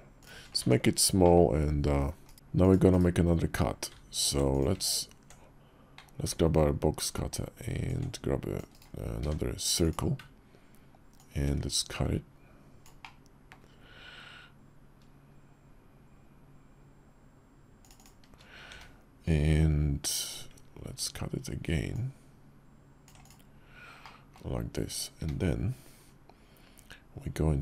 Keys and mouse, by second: 0.4 Tab, 0.9 middle click, 2.0 /, 2.6 /, 5.7 alt+w, 7.7-8.3 ctrl+drag, 8.9 d, 11.0-17.9 ctrl+drag, 21.7-23.3 ctrl+drag, 23.8-24.1 middle drag, 24.9 `, 27.5 d.